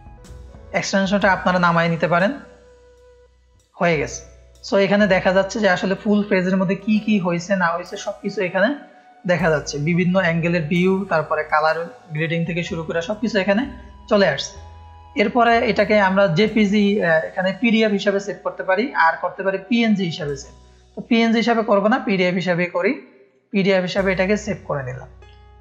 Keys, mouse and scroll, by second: 4.6 middle click, 4.6 scroll down 1, 23.2 click.